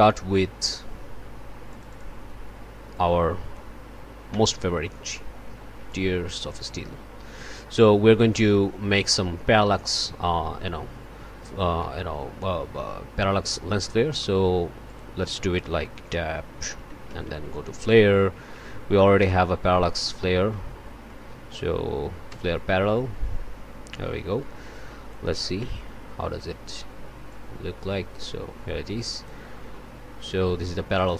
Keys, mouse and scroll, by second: 1.7 click, 2.9 click, 4.3 1, 5.9-8.6 drag, 11.7 click, 14.2 click, 14.8 click, 15.9 Tab, 16.6-17.7 typing, 18.3 Down, 19.5 Down, 20.4 Up, 22.3 Return, 24.7 click, 25.6 1, 27.3-31.1 drag.